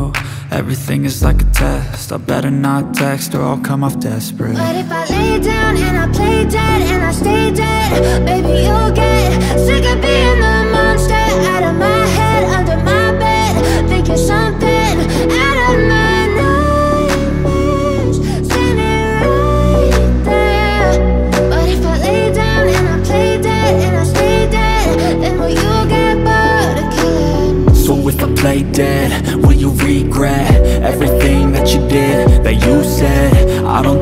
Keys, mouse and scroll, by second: 6.0 alt+scroll up 1, 6.9 Right, 10.9 click, 11.3 alt+scroll down 1, 11.7 space, 11.7 click, 17.3-21.7 shift+drag, 23.8-26.6 drag, 28.3 click, 29.5 alt+scroll down 1, 29.8 click, 30.0 space, 30.7 click, 31.1 alt+scroll up 1, 31.4 space, 31.6-32.8 drag, 33.2 Left.